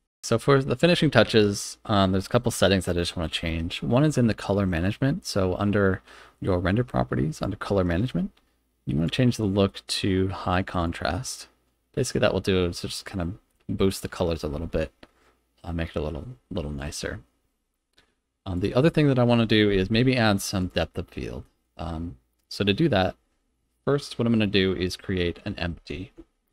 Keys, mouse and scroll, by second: 0.2 click, 7.3 click, 9.0-10.8 drag, 18.5 click, 20.5 click, 21.1-21.5 middle drag, 26.1 shift+a.